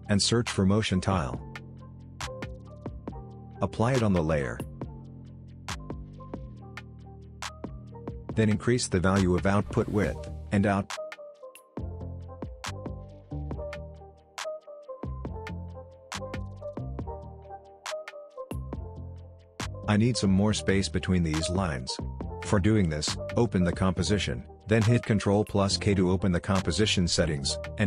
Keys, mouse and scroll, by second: 1.1-2.8 typing, 3.7-5.5 drag, 6.4-8.2 scroll down 1, 10.3-12.8 drag, 15.1-16.3 scroll up 1, 16.3-17.9 scroll down 1, 17.9 click, 18.8-20.6 scroll up 1, 23.7 click, 25.4 ctrl+k, 27.2-27.8 drag.